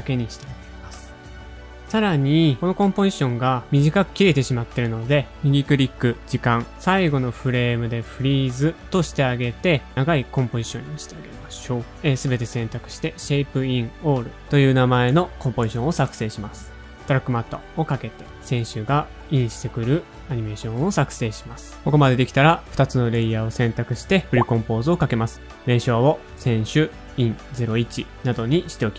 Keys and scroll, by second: 0.6 0, 2.6-4.4 typing, 2.7 Home, 3.4 Tab, 11.7 shift+super+a, 11.8 shift+super+c, 12.6-15.8 typing, 17.0-17.8 typing, 18.9 0, 20.6-22.0 typing, 22.2 shift+Page_Up, 24.2 shift+super+c, 24.2 space, 25.4-27.2 typing, 28.3-28.9 typing.